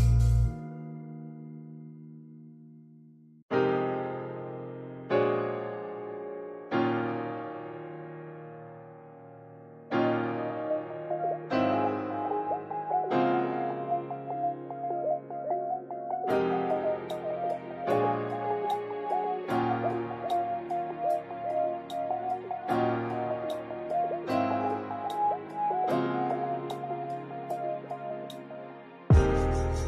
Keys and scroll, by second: 5.9 space, 8.8 space, 9.8 space, 11.1 space, 23.7 space, 29.2 space.